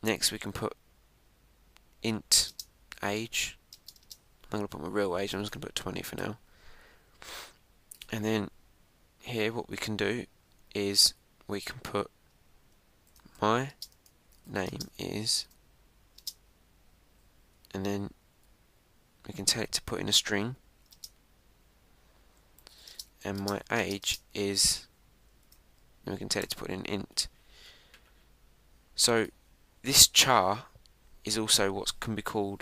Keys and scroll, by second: 11.6 Left, 12.0 Right, 14.5 shift+m, 16.3 shift+;, 18.5 shift+5, 26.3 shift+%.